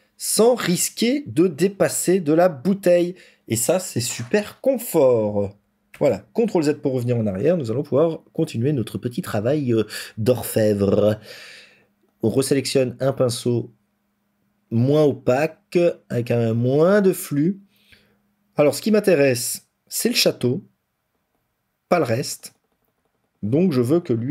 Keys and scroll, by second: 5.8 ctrl+z.